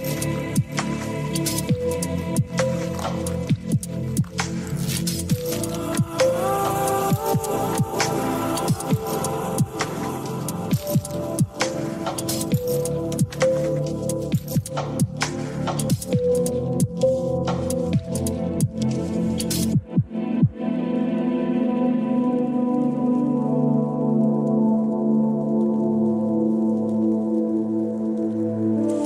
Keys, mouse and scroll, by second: 3.8-6.7 drag, 7.4-8.3 drag, 11.9-15.3 typing, 15.2 click, 16.4 s, 16.4 g, 19.2 click, 21.5 click, 24.4 g, 27.5 click, 28.5 click.